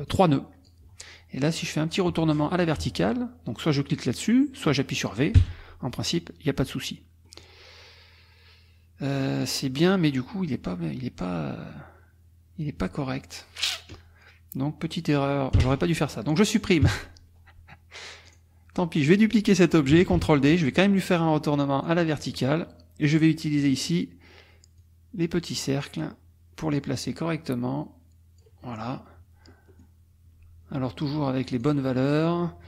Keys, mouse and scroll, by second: 0.1 click, 1.6 click, 5.4 v, 7.2 click, 15.5 Delete, 16.8 -, 18.2 click, 20.1 ctrl+d, 21.8 click, 23.6 click, 24.8 click, 27.0 click, 28.6 middle click, 29.7 middle click, 31.5 click.